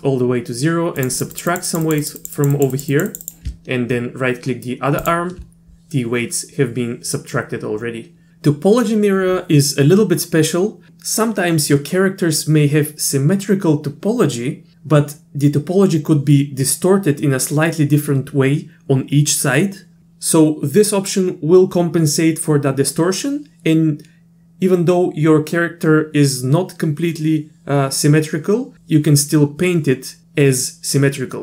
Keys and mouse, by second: 1.0 click, 1.2 click, 1.3 click, 1.5 click, 1.7 click, 1.8 click, 2.0 click, 2.2 click, 2.3 click, 2.5 click, 2.7 click, 2.9 click, 3.1 click, 3.2 click, 5.0 ctrl+click.